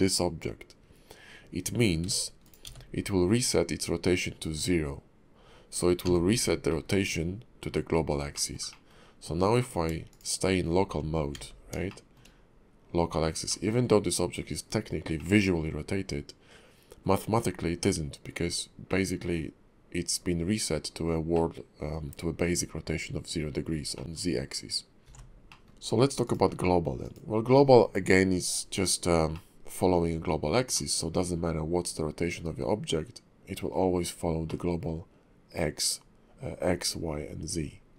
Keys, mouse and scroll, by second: 2.0 b, 2.6 n, 6.0 n, 6.7 middle click, 8.3 shift+middle click, 8.7 middle click, 9.6 click, 10.1 shift+click, 11.3 alt+x, 11.9 shift+middle click, 13.5 middle click, 15.2 middle click, 17.4-17.8 scroll up 2, 17.8 middle click, 18.5-18.9 scroll down 2, 18.9 middle click, 21.3 middle click, 23.9 middle click, 25.0 shift+click, 25.0 alt+x, 25.5 middle click, 26.2 click, 29.3 middle click, 30.1-30.7 scroll down 3, 30.7 middle click, 34.5 middle click.